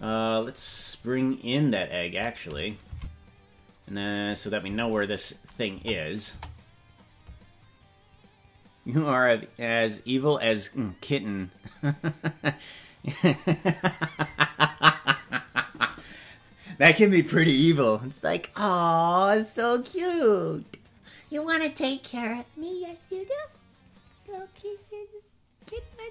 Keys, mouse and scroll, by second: 0.7-1.8 scroll up 1, 1.8 click, 1.8 scroll up 1, 2.9 Left, 5.7 KP_0, 6.3 KP_0.